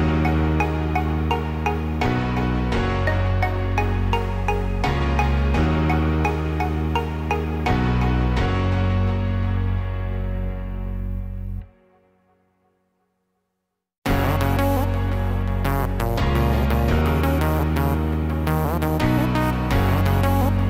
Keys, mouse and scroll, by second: 4.9 click, 6.0 h, 7.0-7.5 scroll up 3, 7.5 shift+middle click, 8.2 middle click, 9.2 scroll up 2, 10.5 shift+a, 16.8-17.3 scroll down 4, 17.2-19.0 scroll up 4, 19.0 Tab, 20.2 click.